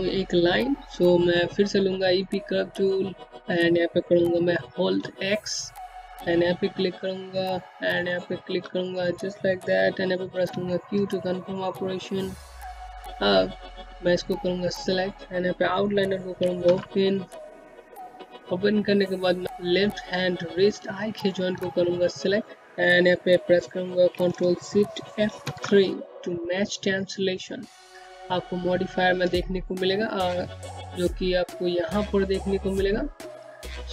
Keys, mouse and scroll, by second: 0.7 click, 3.6 scroll up 1, 4.6 middle click, 5.7-9.3 typing, 7.3 click, 9.0 click, 11.2 typing, 11.7-12.2 scroll down 1, 13.2 alt+middle click, 13.4 Home, 14.7 click, 17.3 alt+o, 19.2 ctrl+click, 23.7 ctrl+shift+F3, 29.8 click, 33.1 click, 33.4-33.9 scroll up 1.